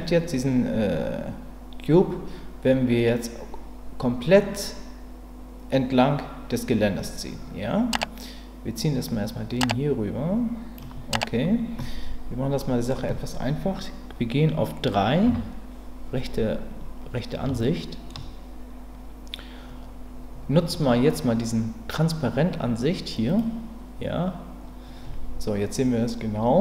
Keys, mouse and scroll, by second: 7.9-10.8 drag, 12.6 middle click, 15.2 KP_3, 17.6 shift+middle click, 23.3 click.